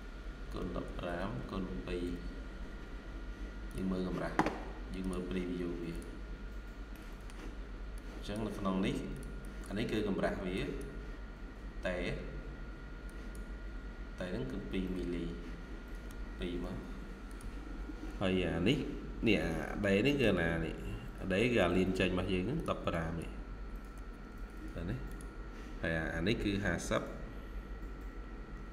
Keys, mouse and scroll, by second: 0.0-1.9 typing, 6.1-6.8 scroll up 1, 6.8 middle click, 9.3 double click, 16.5 2, 18.4 scroll up 1, 18.6 typing, 19.5 scroll up 1, 19.8 typing, 19.9 middle click, 20.4-22.0 scroll up 1, 22.8 double click, 24.2 typing, 25.9-26.3 scroll down 1, 26.3 typing, 28.4-28.7 typing.